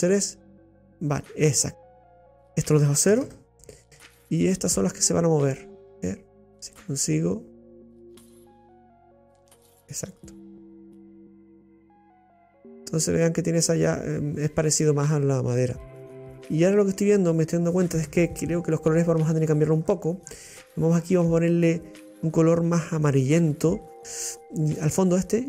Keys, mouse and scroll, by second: 0.3-2.6 drag, 5.0-7.8 drag, 8.7-12.0 drag, 12.0-15.0 middle drag, 17.7-18.2 scroll up 2.